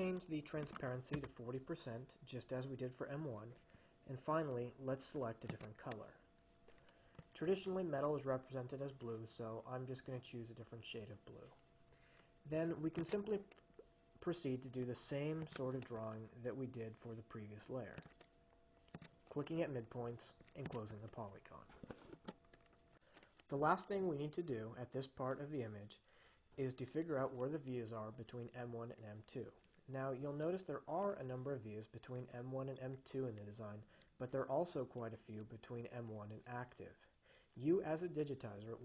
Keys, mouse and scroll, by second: 0.6-1.5 typing, 5.8 click, 13.2 click, 15.7 click, 18.2 click, 19.2 click, 21.0 click, 22.4 Escape.